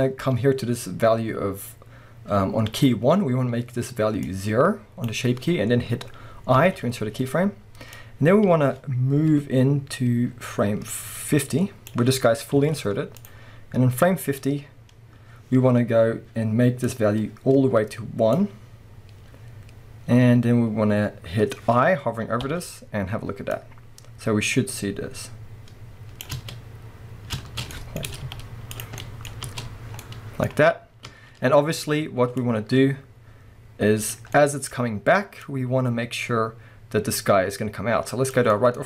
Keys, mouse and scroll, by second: 12.3 scroll down 1, 12.6 z, 13.5-27.7 drag, 13.5-14.8 scroll up 1, 15.3-16.9 scroll up 1, 26.4 space, 27.4 space, 27.7-32.4 middle drag, 28.2 z, 29.0-29.4 scroll down 4, 29.4 space, 31.1 space, 32.4-34.4 drag, 34.4-35.5 middle drag, 34.7-35.5 scroll up 2, 35.5-38.5 drag, 38.5-38.8 middle drag.